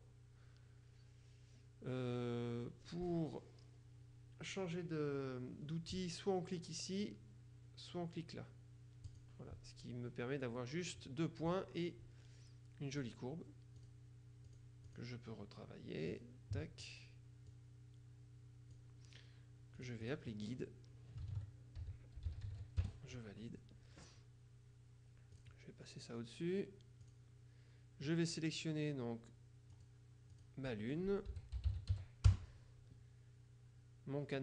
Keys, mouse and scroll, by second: 9.1 click, 13.1 click, 13.9 click, 16.2 click, 17.6-19.3 drag, 19.9 click, 21.4 ctrl+a, 21.9 ctrl+g, 22.3 ctrl+u, 22.5 ctrl+d, 22.6 ctrl+e, 22.9 ctrl+Return, 25.4 click, 27.2 click, 29.9 click, 31.2-32.6 typing.